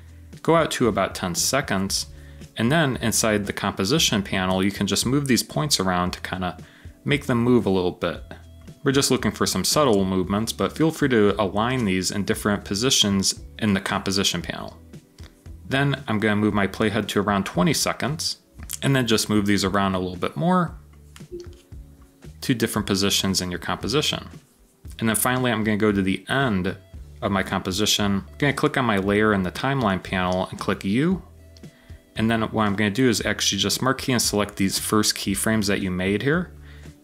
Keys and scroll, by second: 26.2 typing, 30.2-31.0 typing.